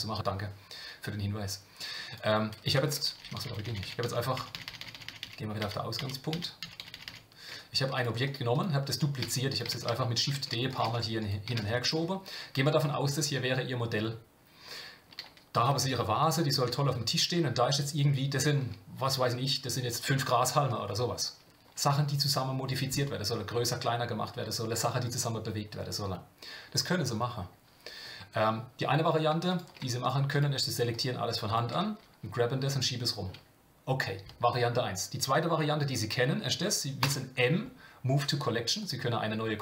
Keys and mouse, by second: 2.1 click, 3.1-7.5 ctrl+z, 9.2 shift+d, 15.6 click, 15.7 g, 29.5 click, 31.4 shift+click, 37.0 m.